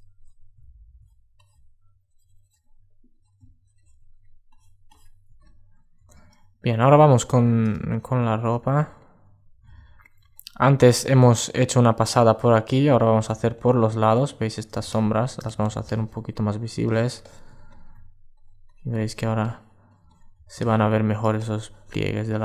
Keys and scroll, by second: 4.9 alt+space, 6.7 alt+space, 8.5 super+space, 9.9 super+space, 17.2 alt+space.